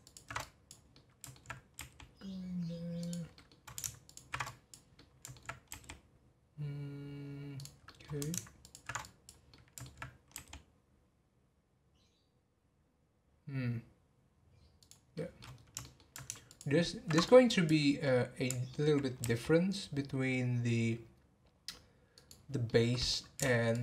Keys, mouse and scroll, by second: 0.0 ctrl+alt+shift+click, 0.4 click, 0.9 middle click, 1.8 r, 3.3 middle click, 4.0 ctrl+alt+shift+click, 4.4 click, 4.9 middle click, 5.7 r, 7.8 middle click, 8.6 ctrl+alt+shift+click, 9.0 click, 9.5 middle click, 10.3 r, 15.1 middle click, 15.6 scroll up 1, 15.8 shift+middle click, 16.4 ctrl+alt+shift+click, 17.2 click, 18.0-19.2 middle drag, 19.2 r, 22.6-23.7 middle drag, 23.7 ctrl+alt+shift+click.